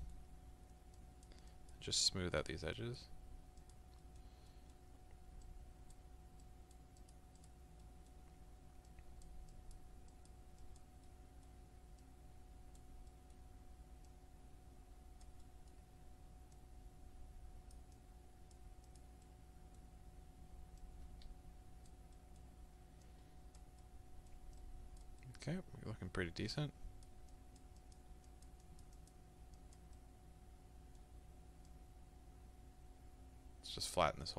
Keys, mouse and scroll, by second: 1.0-4.0 drag, 4.0-5.5 middle drag, 5.5-7.8 drag, 7.8-8.9 middle drag, 8.9-11.1 drag, 11.1 middle click, 12.0-13.1 drag, 13.1-14.1 middle drag, 14.1-15.5 drag, 15.5-16.6 middle drag, 16.6-19.3 drag, 19.3-20.8 middle drag, 20.8-22.2 drag, 22.2 middle click, 23.1 click, 23.9 middle click, 24.6 click, 25.0 scroll down 2, 25.2-26.5 middle drag, 26.5-30.0 drag, 30.0-31.7 middle drag, 31.7-34.3 drag.